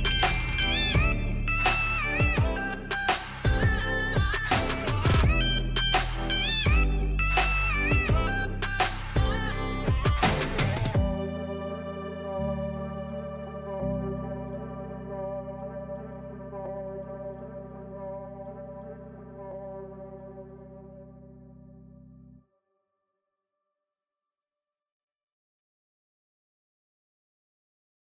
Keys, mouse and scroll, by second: 1.3-3.5 typing, 5.5 click, 7.8-11.1 drag, 12.3-12.6 scroll down 1, 12.8-16.3 drag, 16.5 ctrl+Scroll_Lock, 16.5-19.2 drag, 19.9 Escape, 21.2 click.